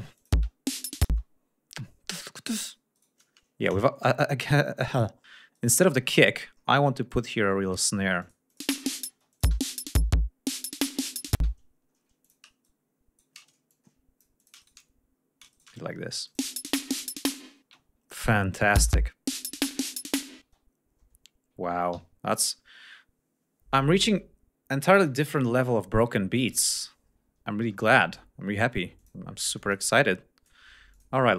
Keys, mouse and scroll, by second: 0.2 ctrl+click, 0.4 space, 1.1 space, 1.4-1.8 scroll up 2, 1.9 scroll down 2, 2.7 shift+right click, 3.0 shift+right click, 3.4 shift+scroll down 2, 4.1 shift+click, 4.6 shift+scroll down 2, 5.6 shift+right click, 5.9 shift+scroll up 2, 6.6 scroll down 2, 7.1 click, 8.2-8.8 drag, 8.7 space, 9.4 click, 11.4 space, 11.7 ctrl+scroll up 2, 12.3 ctrl+shift+click, 12.7 ctrl+shift+right click, 13.7 ctrl+shift+click, 14.6 ctrl+shift+right click, 15.0 ctrl+shift+scroll up 3, 15.5 shift+right click, 16.3 ctrl+click, 16.5 ctrl+space, 17.7 space, 17.8 ctrl+scroll down 1, 18.6 click, 18.8 space, 19.9 g, 20.1 ctrl+scroll down 1, 20.5 ctrl+space, 21.0 ctrl+scroll down 2, 22.0 ctrl+s, 22.5 ctrl+scroll up 3, 26.9 ctrl+scroll up 2, 29.0 click, 29.6 click, 30.0 click, 30.9 click.